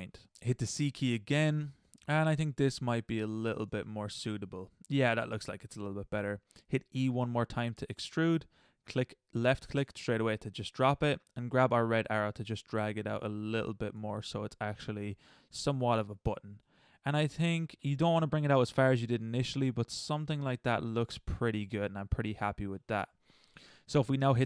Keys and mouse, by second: 0.3 middle click, 0.7 c, 3.7 click, 3.7 middle click, 4.3 middle click, 4.9 middle click, 7.2 e, 11.2-13.3 middle drag, 13.3-14.1 right drag, 14.2 middle click, 14.6 middle click, 15.5 middle drag, 15.8 middle click, 16.2 middle click, 16.8-17.2 middle drag, 18.2 middle click, 18.7 middle drag, 19.2 middle click, 19.6 middle click, 20.2 middle drag, 20.5 middle click, 20.8 middle click, 21.1-21.8 middle drag, 21.9-23.5 middle drag, 24.2 Tab.